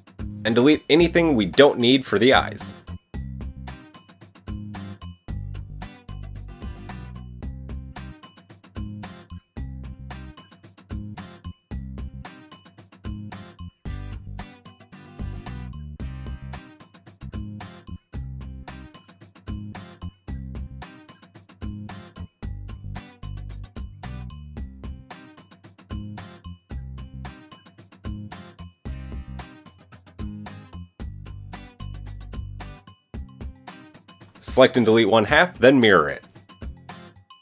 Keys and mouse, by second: 2.5 alt+click, 3.4 alt+shift+click, 5.3 alt+shift+click, 7.0 alt+shift+click, 8.3 alt+shift+click, 9.1 ctrl+z, 10.3 alt+shift+click, 10.6-19.1 middle drag, 14.2 x, 19.1 click, 19.9 shift+middle click, 20.2 shift+click, 20.3-21.4 shift+middle drag, 21.4-22.5 shift+drag, 22.5-31.5 shift+middle drag, 23.6 ctrl+l, 25.4 x, 26.8 KP_1, 27.2 a, 28.3 KP_3, 29.1 KP_1, 29.7 KP_3, 30.2 KP_1, 31.5 click, 31.8-33.7 shift+middle drag, 33.7-37.4 drag, 36.3 x.